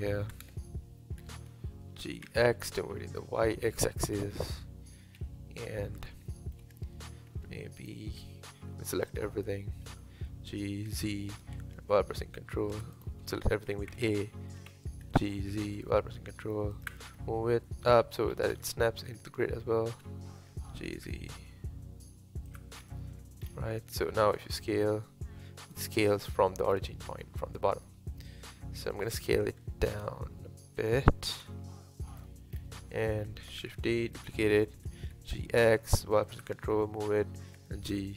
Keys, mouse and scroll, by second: 0.0-1.2 shift+middle drag, 1.2 g, 4.3-4.7 scroll up 4, 5.2 KP_1, 6.0 scroll up 1, 6.3-7.3 shift+middle drag, 7.3 s, 8.2 Tab, 10.2 g, 13.9 a, 14.0 a, 14.7 a, 15.1 g, 17.1-18.3 scroll up 1, 18.3-19.6 scroll up 6, 19.6-20.7 shift+middle drag, 20.7 g, 22.8-23.1 scroll down 3, 23.1 Tab, 24.4 s, 26.7-27.1 scroll down 2, 27.1-29.6 middle drag, 29.6 s, 31.4 KP_1, 32.2-32.5 scroll up 1, 32.5-32.9 scroll down 1, 32.9-33.7 shift+middle drag, 33.7 shift+d, 34.8 g, 37.4 s.